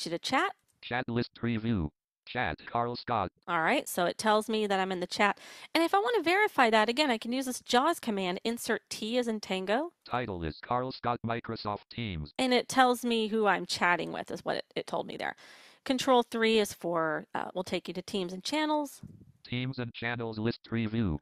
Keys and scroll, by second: 8.0 Insert, 8.0 t, 15.8 ctrl+3.